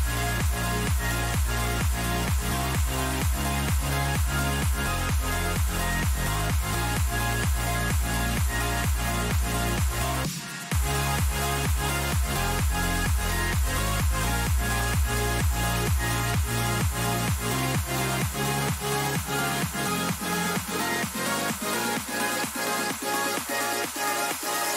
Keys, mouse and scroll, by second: 4.8-10.6 middle drag, 7.7 k, 12.8-15.3 middle drag, 15.3 a, 16.0-17.6 middle drag, 17.6 k.